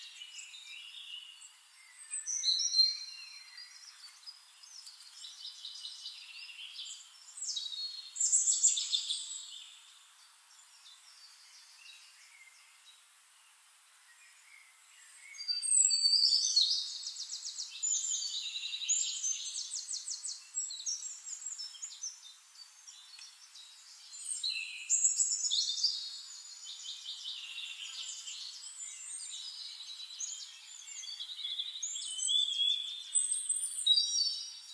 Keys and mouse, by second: 8.1-10.2 drag, 9.1-10.2 right drag, 10.6-23.1 drag, 24.8-30.3 drag, 30.6 click, 31.5-34.1 drag, 34.3-34.7 drag.